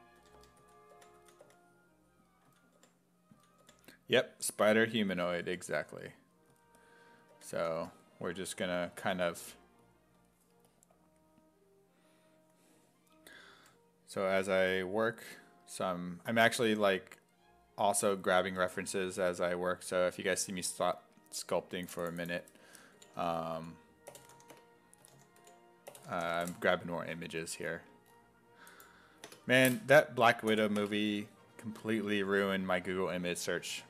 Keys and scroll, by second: 0.0-3.7 typing, 5.2 s, 5.5 5, 6.5-8.3 typing, 22.8-27.0 typing, 29.3 space, 30.5 BackSpace, 30.8 space.